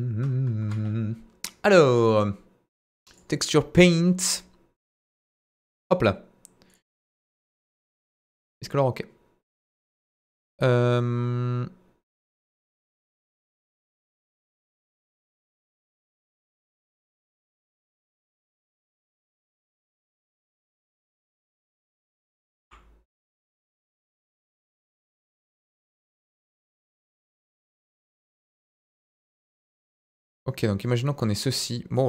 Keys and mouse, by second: 0.5 KP_1, 2.1-3.2 drag, 5.8-8.4 drag, 16.4 click, 16.9 click, 18.1 click, 19.1-19.8 drag, 20.9-22.6 typing, 26.2 click, 26.7-30.6 drag, 30.8 middle click.